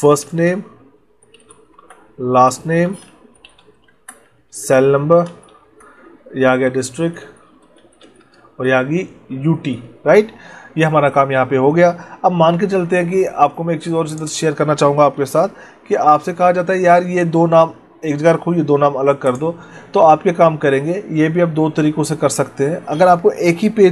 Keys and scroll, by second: 0.2 space, 1.6 Tab, 2.8 space, 3.8 Tab, 5.1 space, 5.5 Tab, 8.1 space, 8.3 Tab, 15.1 ctrl+b, 15.8 ctrl+e.